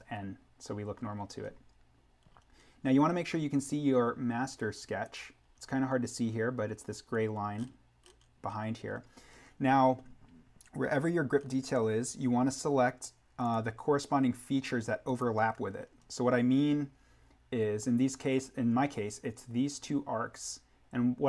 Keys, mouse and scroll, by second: 0.7-4.1 scroll down 1, 4.4 click, 5.5-6.3 scroll down 1, 13.4 click, 15.8-16.8 scroll down 1.